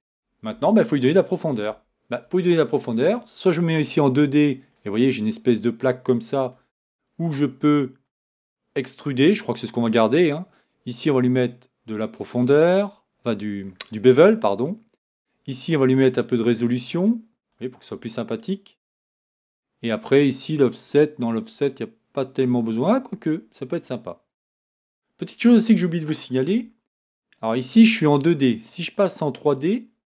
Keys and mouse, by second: 0.5 Tab, 1.7 Tab, 26.5 Tab.